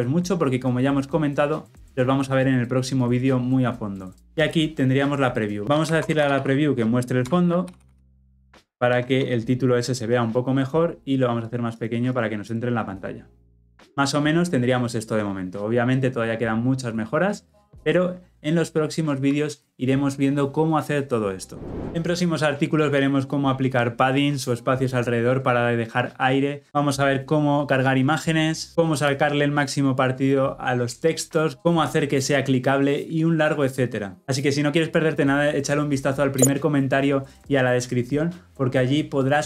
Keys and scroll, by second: 7.2 Return, 11.4 ctrl+-.